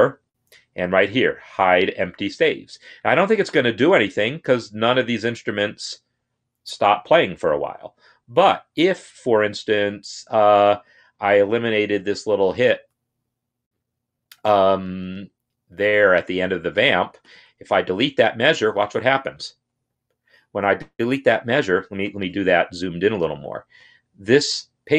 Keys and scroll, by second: 19.6 Delete, 21.8 ctrl+z.